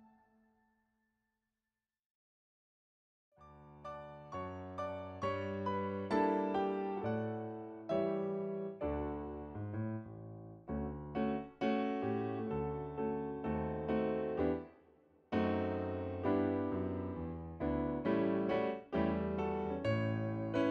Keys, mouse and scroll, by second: 1.1 scroll down 1, 8.6 scroll up 1, 14.3 right click, 15.3 scroll down 1.